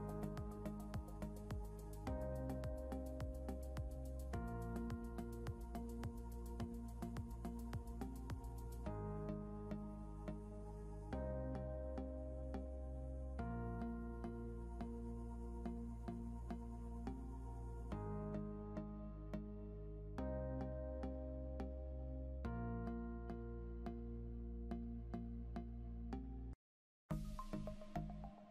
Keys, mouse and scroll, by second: 0.4 scroll up 1, 4.3 scroll up 1, 7.1 Up, 8.2 Up, 13.9 scroll up 1, 21.3 scroll down 1, 24.6 scroll up 1, 27.7 scroll up 1.